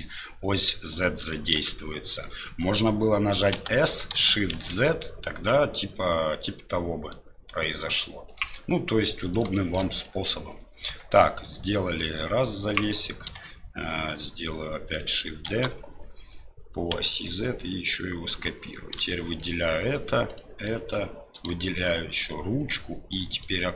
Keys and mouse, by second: 1.5 ctrl+z, 3.5 s, 9.6 shift+middle click, 10.9 Tab, 11.9-12.9 drag, 15.5 shift+d, 19.4 shift+right click, 20.3 shift+right click, 21.7 shift+right click.